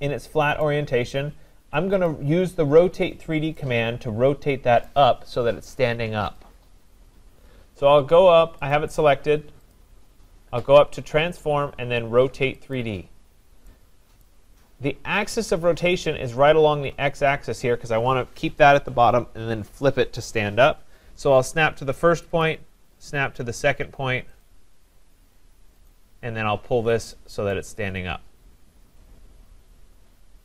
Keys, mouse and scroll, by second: 0.6 right click, 2.1 click, 4.8 right click, 8.7 click, 9.7 click, 11.1 click, 12.8 click, 14.2 right click, 22.4 click, 24.4 click, 25.9 click, 27.1 click.